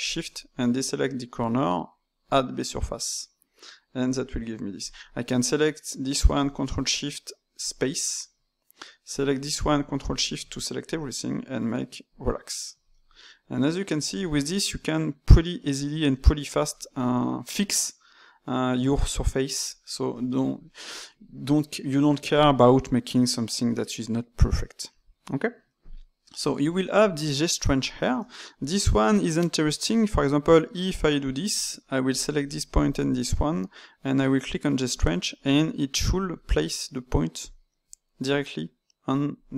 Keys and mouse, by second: 0.0 shift+click, 2.2 click, 3.2-4.7 middle drag, 4.7 click, 6.4 ctrl+shift+click, 7.6-9.1 drag, 10.0 ctrl+shift+click, 12.0 click, 12.9-20.0 ctrl+middle drag, 20.2-23.6 ctrl+middle drag, 24.4-29.1 middle drag, 29.1-29.8 d, 30.2-31.5 drag, 31.5 d, 32.1 click, 32.7 ctrl+shift+click, 37.4-39.5 drag.